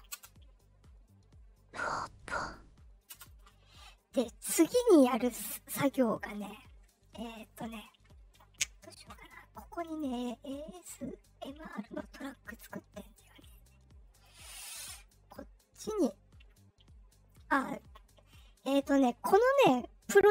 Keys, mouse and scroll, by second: 0.1 space, 3.0 space, 4.2-4.6 drag, 9.8 click, 12.4 click, 13.0 click, 14.1 click.